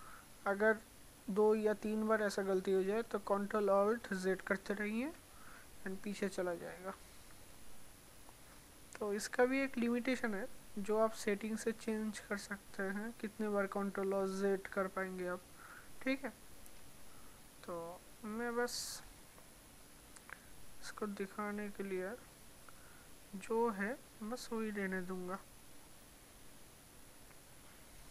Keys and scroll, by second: 4.4 ctrl+alt+z.